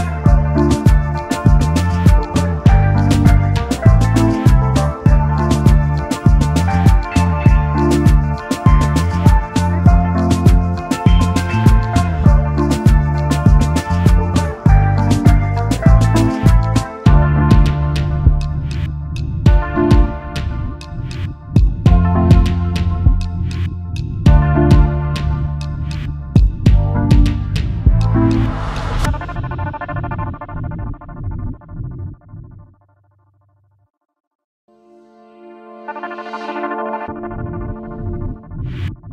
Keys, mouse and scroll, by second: 0.3 alt+scroll down 1, 0.5 space, 1.7 alt+shift+click, 2.9 alt+scroll up 1, 3.1 space, 4.1 space, 4.2 double click, 5.3 right click, 8.7 alt+scroll up 1, 10.2 right click, 13.6 alt+scroll up 1, 15.3 alt+click, 16.3 alt+click, 16.8 alt+scroll down 1, 17.9 double click, 18.1 alt+scroll down 1, 18.3 space, 18.8 space, 20.3 right click, 23.6 alt+scroll up 1, 24.8 alt+click, 25.1 alt+scroll down 1, 26.8 double click, 27.1 alt+scroll down 1, 27.3 space, 28.1 space, 30.6 shift+click, 31.6 shift+click, 35.6 double click, 35.9-38.0 scroll down 1, 38.3 shift+click.